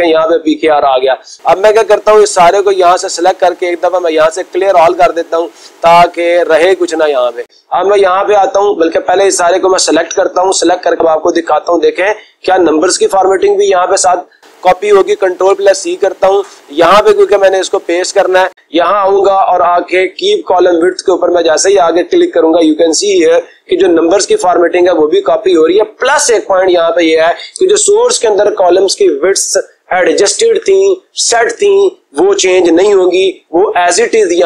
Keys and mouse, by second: 3.0-4.1 right drag, 4.8 click, 6.5 click, 7.4 click, 8.2 click, 13.0 click, 15.3 ctrl+c, 17.5 click, 18.9-20.1 drag, 23.9 click, 24.2 right click.